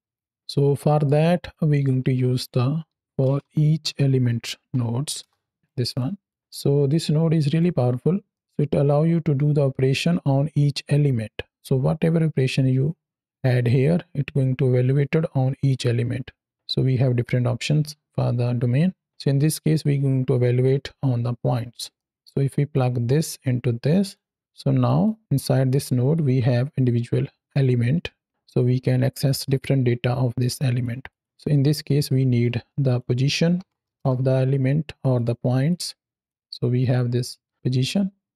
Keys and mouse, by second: 0.3-0.9 middle drag, 1.9 shift+a, 5.8 click, 6.1-7.5 drag, 8.2 middle click, 15.6-19.1 drag, 21.8 middle click, 22.6-24.0 drag, 24.4-24.7 drag, 24.9 click, 25.6 click, 26.0-30.7 drag, 31.2-31.6 middle drag, 32.1 shift+a, 35.0 click, 35.6-36.1 drag, 36.3-38.3 drag.